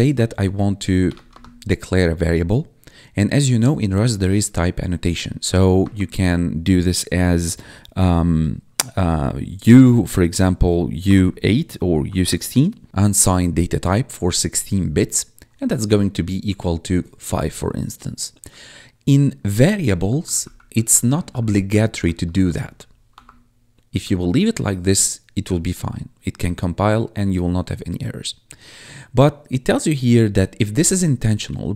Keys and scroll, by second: 0.0-1.2 typing, 4.9 BackSpace, 5.4 shift+;, 5.7 space, 10.9 u, 16.4 Tab, 20.1 ctrl+Left, 20.8 Left, 21.6 shift+Left, 22.1 BackSpace, 22.5 ctrl+s, 23.0 Escape, 24.1 ctrl+Right.